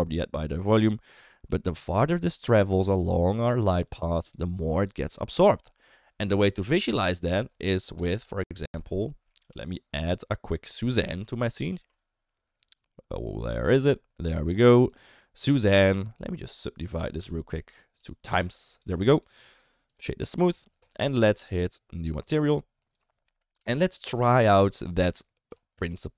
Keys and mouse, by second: 0.1 d, 1.7-5.3 typing, 2.8 click, 3.0 click, 3.2 click, 3.3 click, 3.5 click, 3.7 click, 3.8 click, 4.0 click, 4.2 drag, 4.5 click, 4.7 click, 8.3 F12, 10.9 Delete, 11.6 shift+a, 16.8-18.0 drag, 18.6 click, 19.4 right click, 22.8 click, 23.5 Home, 25.4 click.